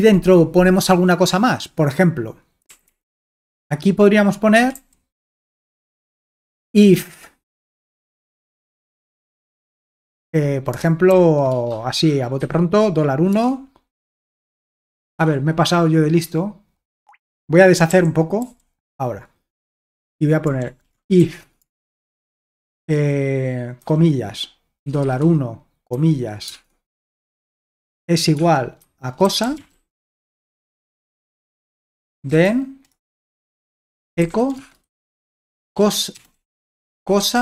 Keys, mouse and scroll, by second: 2.7-3.4 typing, 4.5-7.2 typing, 9.2 space, 11.1-14.5 typing, 15.1 Escape, 17.0 Escape, 17.9-18.4 typing, 20.4-22.0 typing, 23.8-26.5 typing, 28.2-37.4 typing.